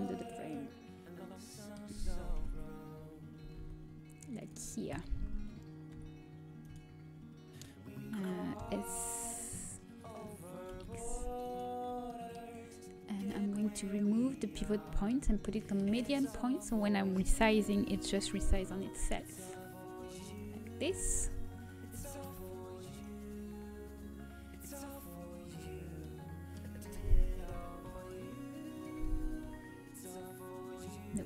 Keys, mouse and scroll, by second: 0.5 middle click, 2.3 KP_3, 3.7 g, 5.5 s, 8.5 s, 11.7-13.8 middle drag, 13.8 click, 15.5-17.6 middle drag, 17.6 s, 20.8 KP_3, 22.0-23.0 middle drag, 23.0-24.8 drag, 27.4 s, 29.2 s.